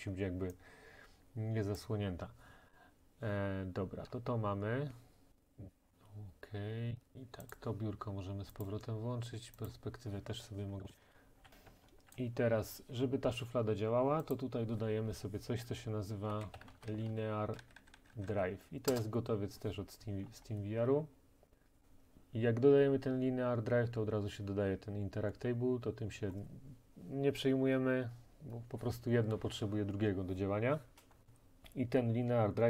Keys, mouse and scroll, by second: 4.1 scroll, 5.9 scroll, 7.6 click, 9.7 click, 10.9 click, 11.0-11.5 typing, 12.2 right click, 12.6-14.3 typing, 14.4 click, 16.4-17.6 typing, 18.9 Return, 20.3-21.1 scroll, 21.8-22.5 scroll.